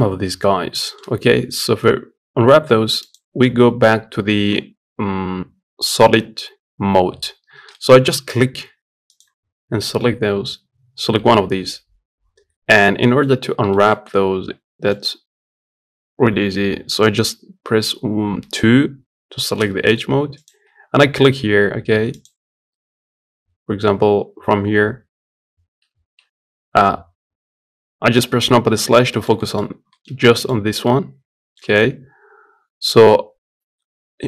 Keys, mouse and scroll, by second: 0.0 scroll down 2, 0.2 scroll up 2, 0.5-2.8 shift+middle drag, 2.8-7.0 drag, 7.0-7.5 scroll down 1, 7.5-10.7 middle drag, 10.7 Tab, 11.5 scroll up 1, 11.8-12.5 scroll down 1, 12.5-12.8 scroll up 1, 12.8-18.2 shift+middle drag, 18.2 2, 20.2 alt+click, 22.0 alt+click, 27.9 KP_Divide, 28.5 scroll up 1, 28.9 shift+middle click, 29.3-29.6 scroll up 1, 29.6 shift+middle click, 30.3-30.6 scroll up 1, 30.6-34.2 middle drag.